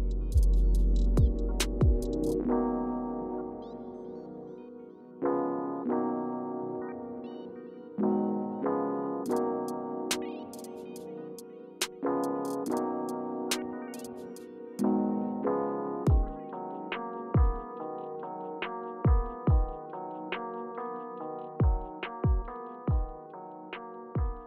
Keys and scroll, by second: 3.9 alt+super+[.